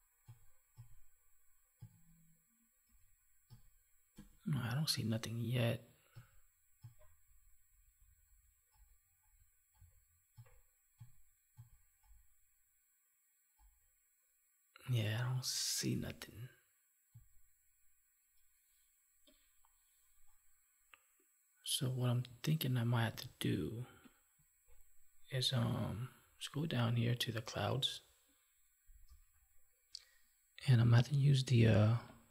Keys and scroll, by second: 23.3 alt+Tab.